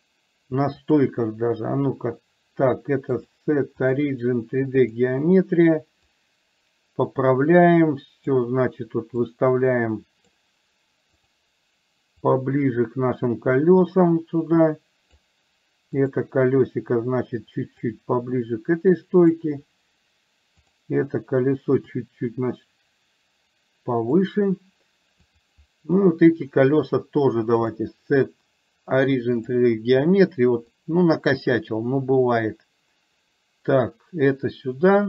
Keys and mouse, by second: 3.3-5.1 drag, 6.1-8.4 drag, 9.3-10.4 drag, 12.4-15.3 drag, 16.0 click, 18.0-19.4 drag, 22.0-24.3 drag, 27.8-29.6 drag, 30.9-35.0 drag.